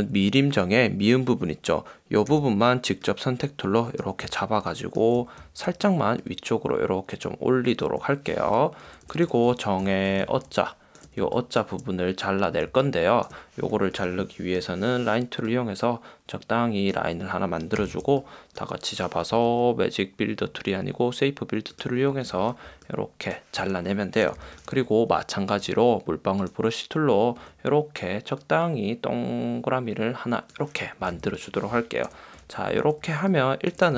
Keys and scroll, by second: 4.4 space, 5.5 space, 9.0 super+-, 10.4 space, 11.4 space, 12.8 space, 24.4 v, 31.3 v, 32.3 super+0, 32.9 space.